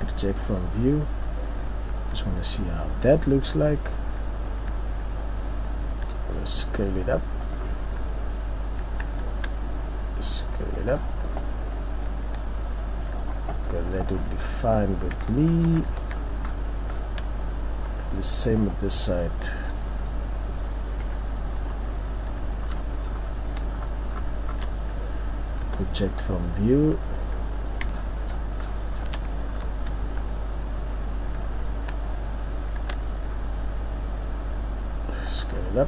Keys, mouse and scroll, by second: 0.3 middle click, 0.9 middle click, 0.9-1.3 scroll up 3, 1.3 middle click, 1.9 Tab, 2.3-2.8 scroll up 4, 2.6 middle click, 5.9 s, 7.7 Tab, 7.7 click, 9.4 Tab, 9.4 s, 11.0 Tab, 11.0 click, 11.4 scroll, 11.8 middle click, 11.8-12.4 scroll down 3, 12.4 middle click, 12.4 scroll, 13.3-13.6 scroll down 3, 14.2 scroll down 1, 15.2 middle click, 15.2 ctrl+scroll, 15.5 ctrl+scroll, 15.6 ctrl+scroll down 1, 15.7 ctrl+scroll down 4, 16.1 shift+scroll down 1, 16.9 shift+scroll, 16.9 ctrl+scroll down 5, 17.0 shift+scroll, 17.2 scroll, 17.3 shift+scroll down 1, 18.6 Tab, 21.2 KP_3, 21.6 KP_1, 22.6-23.3 shift+scroll down 3, 23.8-24.1 scroll down 2, 24.5 shift+scroll up 8, 26.3-26.8 shift+scroll up 3, 26.3 u, 26.8 middle click, 27.4-27.8 scroll up 1, 27.9 shift+scroll down 1, 28.0-29.4 shift+scroll down 9, 29.4-30.0 ctrl+scroll up 2, 30.0 Tab, 30.8-31.1 scroll up 2, 31.7 Tab, 32.8 s.